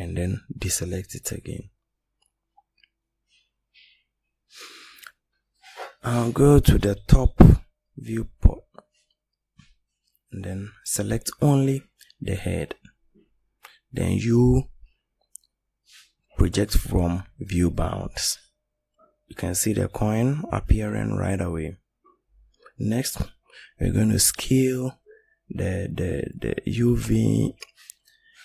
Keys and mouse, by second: 28.0 click.